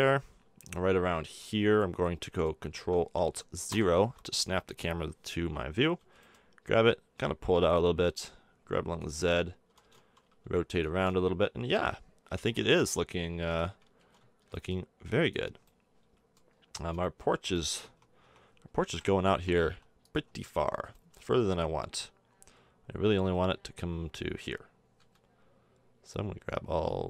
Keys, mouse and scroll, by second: 3.7 ctrl+alt+KP_0, 6.0 g, 8.0 g, 9.7 r, 10.9 g, 14.0 g, 14.2-16.4 middle drag, 17.8 Tab, 18.2 Tab, 18.9 KP_7, 19.3 Tab, 19.6 Tab, 20.2 Tab, 22.4 click, 25.0 b.